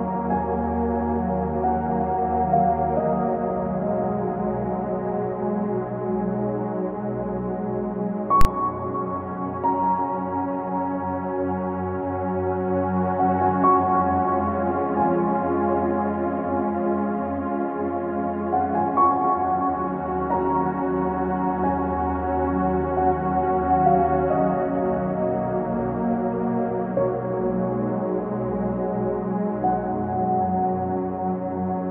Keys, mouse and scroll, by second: 0.5 click, 1.2-1.6 scroll down 4, 1.6-2.0 drag, 2.0 ctrl+z, 2.2 click, 2.5 ctrl+z, 2.6 click, 2.8 click, 3.0 click, 3.4 ctrl+z, 3.5 click, 4.0 ctrl+z, 4.7-5.7 drag, 5.7 click, 6.0 ctrl+z, 6.3 click, 6.5 click, 6.8 ctrl+z, 7.3-8.0 scroll down 3, 7.3 middle click, 8.1 r, 8.4 click, 8.5 scroll up 2, 9.5 click, 13.2 scroll down 1, 13.3 click, 13.8 click, 14.4 click, 17.8 click, 22.1 click, 22.2 s, 26.3 click, 29.0 click, 31.7 click.